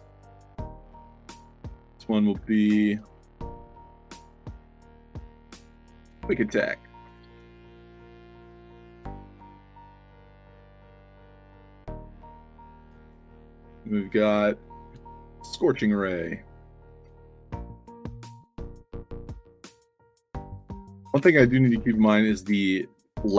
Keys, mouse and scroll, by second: 0.0 click, 1.1 click, 1.5 click, 7.1-8.8 typing, 9.8 click, 10.5 click, 11.8 click, 12.2 click, 18.4-22.4 typing, 23.0 click.